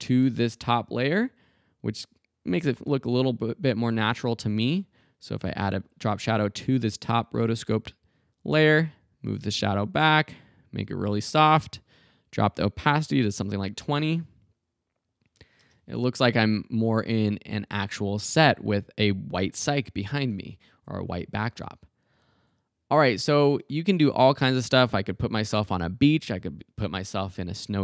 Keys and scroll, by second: 12.9-13.7 typing, 15.6 space, 24.0 space.